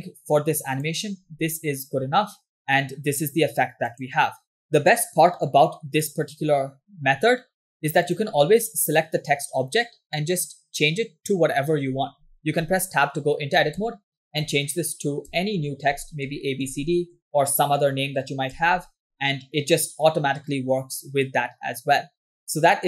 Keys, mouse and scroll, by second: 2.6 space, 4.6 space, 5.0-6.6 drag, 8.4 click, 11.5-13.2 scroll down 1, 13.2 Tab, 14.0 BackSpace, 14.3 BackSpace, 15.3 BackSpace, 16.4 shift+a, 17.1 shift+b, 17.6 shift+c, 17.6 shift+d, 19.1 Tab, 22.3-22.8 drag.